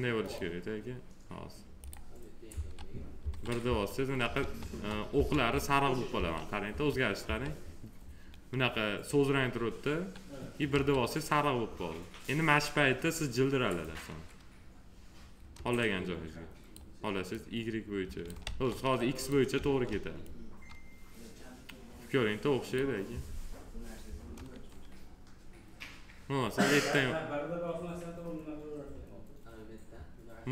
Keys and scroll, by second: 2.4 1, 10.6 1, 18.3 ctrl+z.